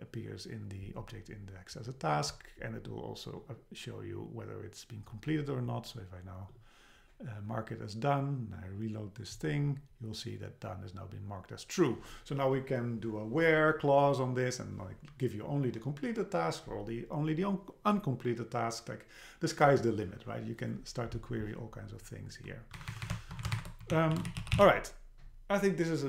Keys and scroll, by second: 22.8 Right, 23.4 Left, 23.6 shift+super+Right.